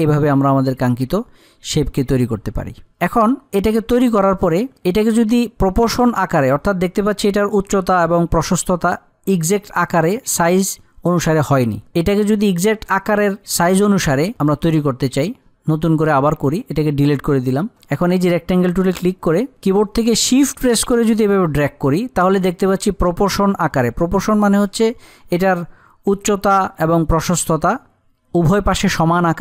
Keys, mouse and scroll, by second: 17.3 Delete, 19.0 click, 21.4-29.4 shift+drag.